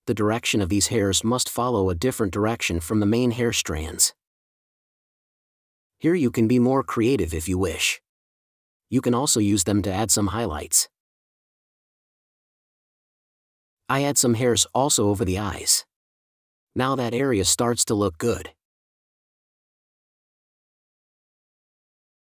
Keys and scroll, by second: 2.3 space, 3.3 super+z, 7.0 space, 9.5 space, 15.1 space, 16.4 space, 19.5 super+space.